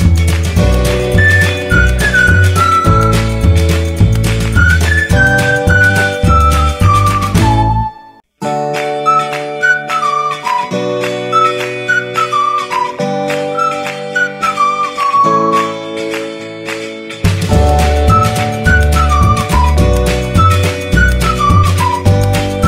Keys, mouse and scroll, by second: 1.3 t, 6.4 shift+r, 13.4-14.6 alt+drag, 20.4 click, 20.7 Down.